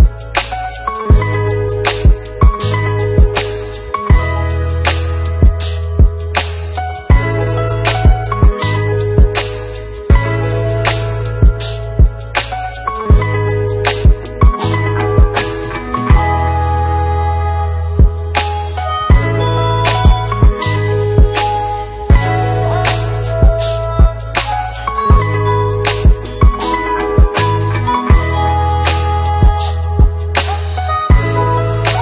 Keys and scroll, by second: 0.9 ctrl+v, 26.4 ctrl+c, 27.4 ctrl+v.